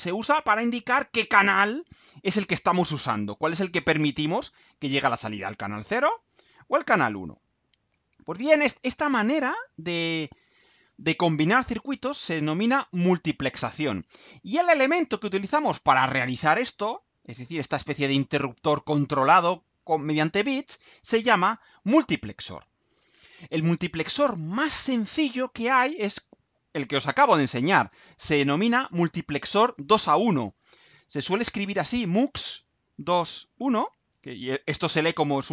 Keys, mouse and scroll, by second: 8.2-8.5 scroll down 2, 9.7-10.1 scroll up 2, 22.1-23.1 scroll down 4, 23.1 middle click, 25.5-26.1 scroll down 2.